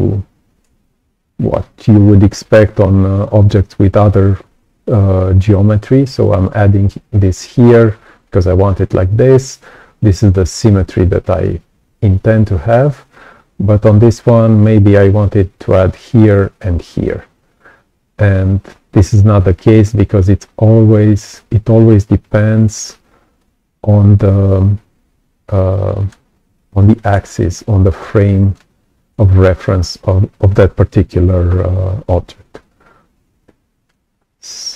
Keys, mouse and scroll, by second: 23.3 click, 25.4 right click, 25.5 click, 26.2-26.6 scroll down 2, 27.0-27.4 scroll up 2, 27.8 right click, 27.8 click, 32.5-33.8 right drag, 32.5-33.8 drag, 34.1-34.5 scroll up 2.